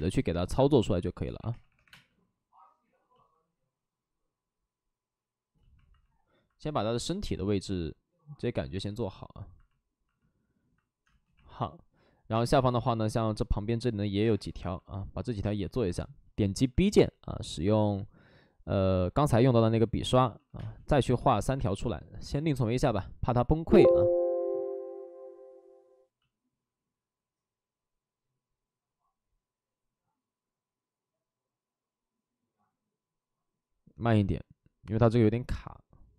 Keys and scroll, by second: 1.1 ctrl+z, 1.4 3, 1.8 3, 1.8 space, 11.0 space, 12.2 space, 14.1 space, 15.3 space, 16.5 b, 19.9-21.5 typing.